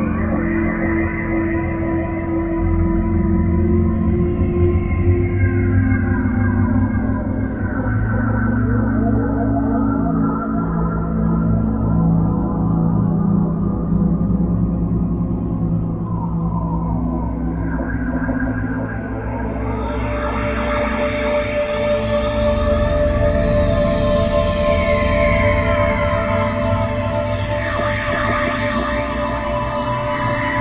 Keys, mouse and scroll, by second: 25.7 middle click, 27.4-27.9 scroll up 3.